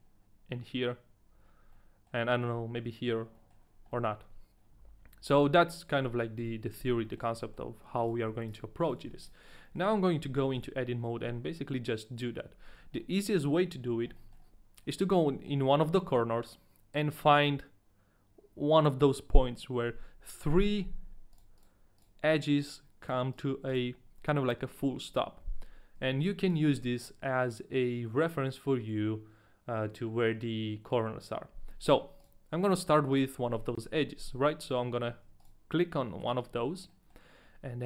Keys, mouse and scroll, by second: 1.4-1.7 scroll up 2, 1.7 middle click, 2.2 middle click, 3.3 middle click, 3.6-3.9 scroll down 1, 3.9 middle click, 4.1-4.4 scroll up 2, 4.5-5.3 scroll down 1, 5.3 Tab, 5.6 middle click, 6.4 KP_1, 7.1 middle click, 7.6 Tab, 7.6 shift+middle click, 7.6-9.8 typing, 8.1 right click, 8.9 right click, 9.2 right click, 9.8 ctrl+a, 9.8 right click, 9.8 shift+middle click, 9.8-10.2 scroll up 1, 10.5 ctrl+a, 10.5 right click, 10.5 shift+middle click, 10.5 scroll up 1, 10.6 Tab, 10.9 middle click, 13.2 Tab, 13.2 shift+middle click, 13.2-13.9 scroll up 3, 14.3 shift+middle click, 14.4-14.8 scroll up 2, 14.8-15.3 scroll down 2, 15.3 middle click, 15.7 scroll up 1, 16.5 middle click, 16.7-17.9 scroll up 1, 21.3 right click, 21.6 right click, 22.0 right click, 22.3 right click, 22.6 right click, 23.0 right click, 23.3 right click, 23.7 right click, 26.0 a, 26.5 right click, 31.8 a, 32.2 right click, 33.1 right click, 35.2 a, 35.4 right click, 36.4-36.7 scroll down 1, 37.2 right click, 37.2 shift+middle click, 37.2-37.8 scroll down 3, 37.2 a.